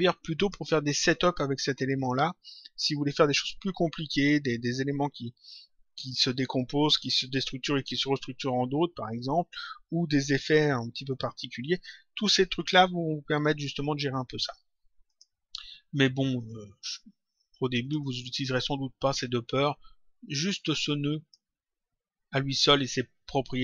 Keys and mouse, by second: 0.2 click, 15.0 click, 17.8 click, 20.3 click.